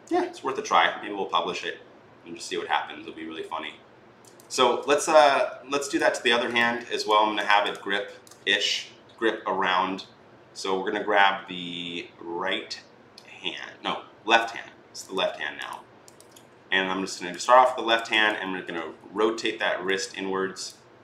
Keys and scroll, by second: 4.4 ctrl+z, 18.8 r.